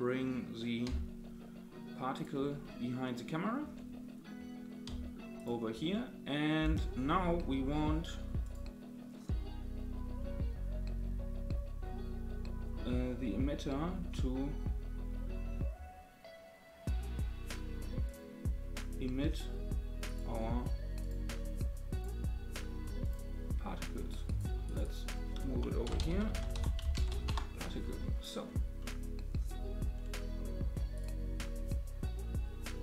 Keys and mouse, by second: 0.8 g, 2.6-3.6 middle drag, 4.8 g, 5.9-6.8 middle drag, 8.4 click, 20.0-21.1 drag, 21.9-23.1 drag, 24.3 click, 24.7-27.8 drag, 28.8-29.2 middle drag, 30.9 click.